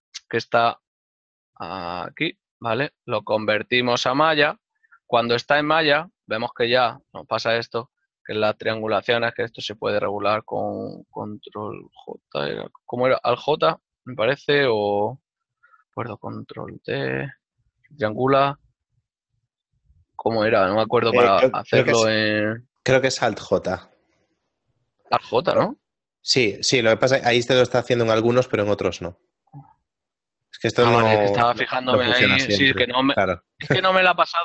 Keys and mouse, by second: 2.5 Tab, 7.2 alt+c, 8.9 Tab, 10.9 click, 12.7 ctrl+j, 14.2 alt+j, 15.5 ctrl+z, 19.9 alt+j, 20.7 ctrl+z, 21.6 shift+j, 22.8 ctrl+z, 23.7 a, 25.7 alt+j, 30.9 right click, 32.3 ctrl+z.